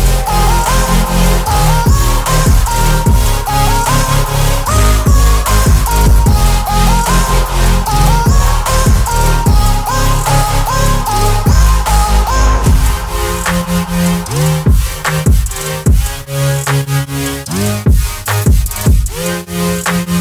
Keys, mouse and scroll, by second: 3.4-6.9 drag.